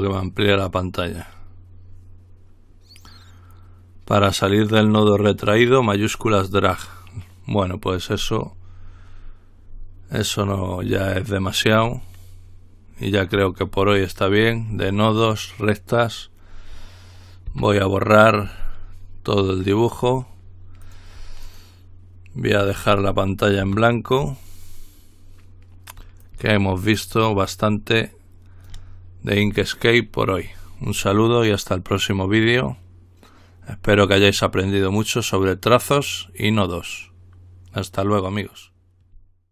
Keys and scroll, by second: 17.7 Delete, 23.9 Delete, 26.2 Delete, 31.2-32.3 typing.